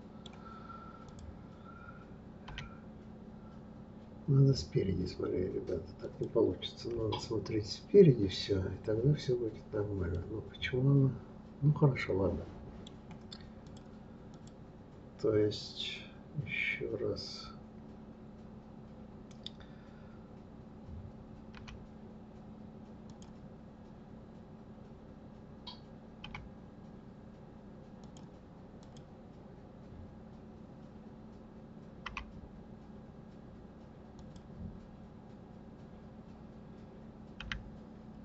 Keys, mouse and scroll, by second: 1.0 click, 2.5 r, 6.9 KP_3, 10.1-13.2 middle drag, 13.6 click, 14.3 click, 28.8 click.